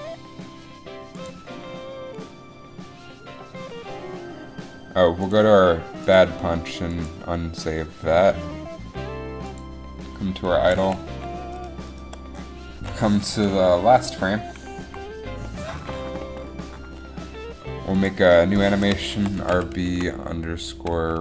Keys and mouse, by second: 10.9 a, 15.0 Up.